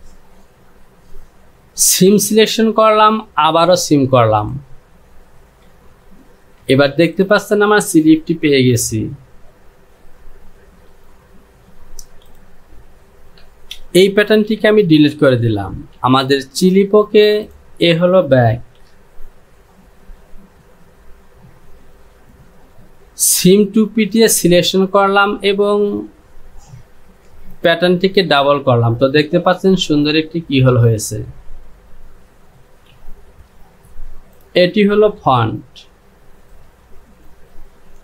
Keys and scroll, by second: 5.8 j, 8.4 Home, 13.9 shift+z, 16.0 j, 18.7 Home, 33.0 j, 35.2 Home.